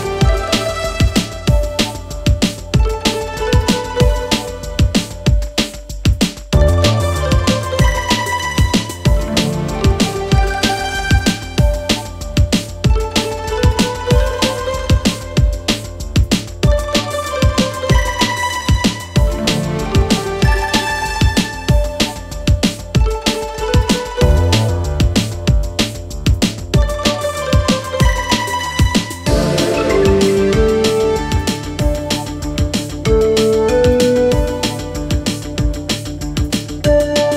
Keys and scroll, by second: 13.9 Escape.